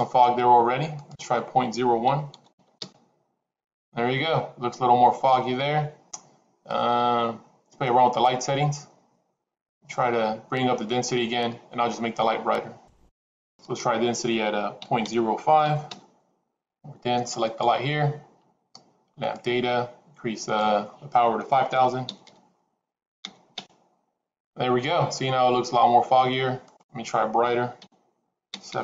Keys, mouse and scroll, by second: 0.9-4.1 drag, 13.7-16.8 drag, 17.5 click, 19.3 click, 20.6-24.7 drag, 22.2 KP_0, 26.7-28.8 drag, 28.7 KP_0.